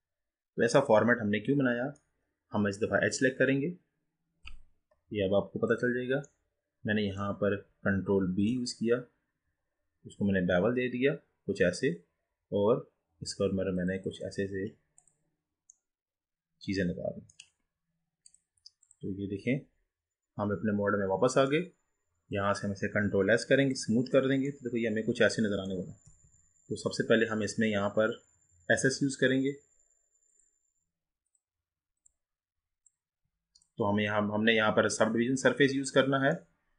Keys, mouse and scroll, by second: 3.1-5.8 drag, 6.4-8.2 middle drag, 8.2 ctrl+b, 14.1 click, 15.0 click, 15.8-18.4 middle drag, 18.4-19.6 drag, 19.6-22.4 middle drag, 22.4-24.6 right drag, 24.6-26.2 middle drag, 26.2 ctrl+z, 26.9-27.4 scroll down 3, 27.4 scroll up 1, 36.6-36.7 middle drag.